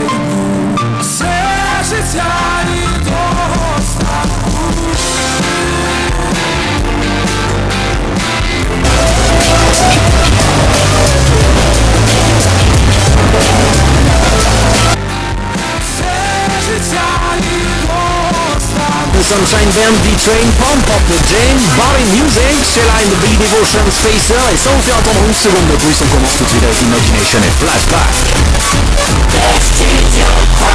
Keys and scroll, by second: 15.0 Page_Down.